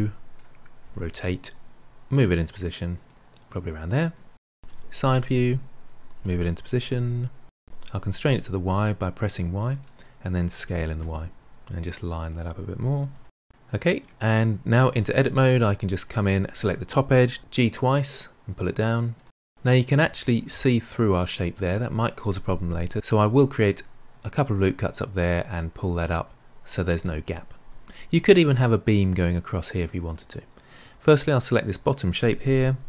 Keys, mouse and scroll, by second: 0.8 r, 2.1 g, 3.2 r, 4.7 KP_3, 6.0 g, 9.0 s, 10.7 g, 11.8 s, 13.2-14.8 middle drag, 14.8 Tab, 15.6 click, 17.3 g, 18.7-22.8 middle drag, 31.2 click.